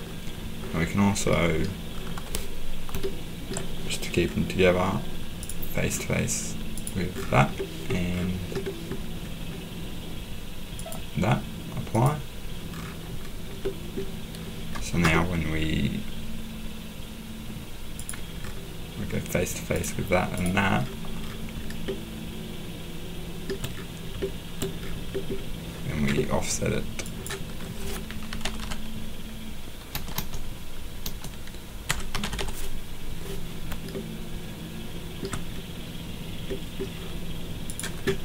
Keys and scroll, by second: 28.0-33.2 typing, 34.3-35.3 typing.